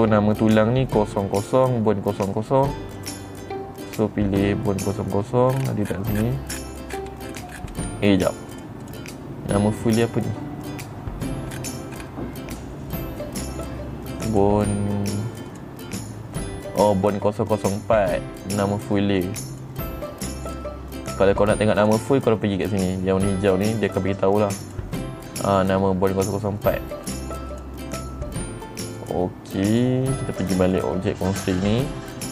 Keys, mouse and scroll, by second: 0.4 click, 3.5 click, 4.4 click, 6.0 middle click, 6.7 middle click, 7.0-8.3 middle drag, 9.0 click, 9.4 click, 10.5 click, 12.1-12.5 scroll down 4, 12.5-12.8 scroll up 2, 14.8 click, 16.0 click, 20.1 click, 21.0 click, 22.3 click, 25.2 click, 27.6 click, 28.0 click, 29.5 click, 31.3 click.